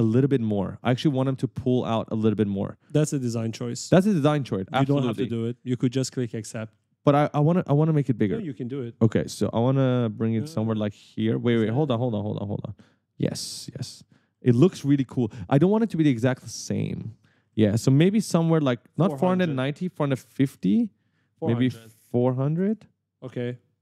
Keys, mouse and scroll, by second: 3.7 click, 4.6 right click, 6.5-6.8 scroll down 1, 8.8 click, 11.1 right click, 12.3-13.0 scroll up 2, 14.4-17.9 typing, 18.9 click, 23.7-23.8 typing.